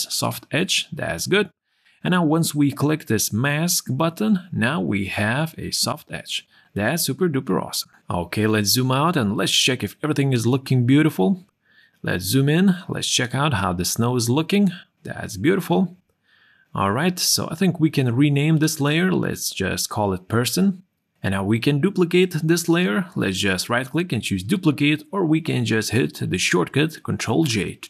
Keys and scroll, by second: 1.2 q, 8.9 ctrl+o, 15.9 ctrl+o, 19.8 shift+p, 21.0 Return, 27.3 ctrl+j.